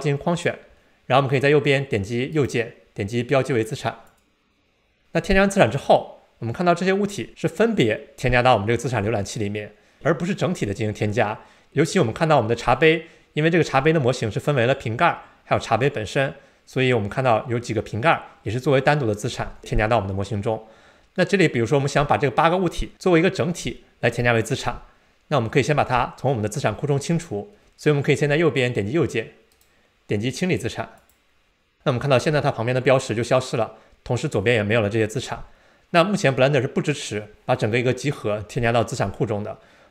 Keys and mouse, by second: 2.3-4.2 right drag, 29.5-31.1 right drag.